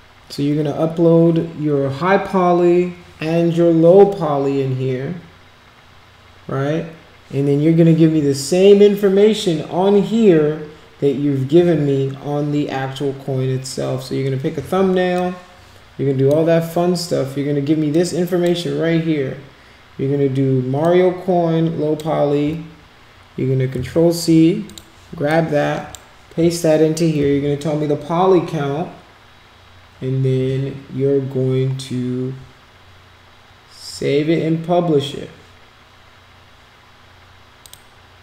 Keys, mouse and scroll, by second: 15.1-16.3 drag, 17.9 click, 20.8-22.0 drag, 23.7 ctrl+c, 24.6 click, 25.2 click, 27.1 ctrl+v, 37.6 click.